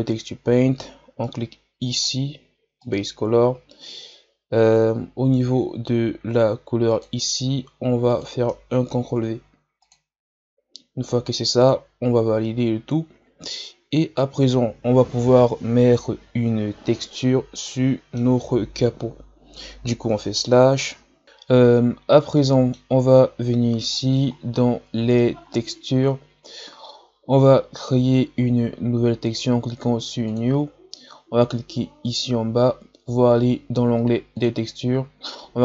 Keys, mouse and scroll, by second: 0.0 click, 9.9 click, 17.7-18.9 middle drag, 18.9 KP_Divide, 21.2 scroll up 10, 22.3-30.3 middle drag, 30.3-35.6 drag.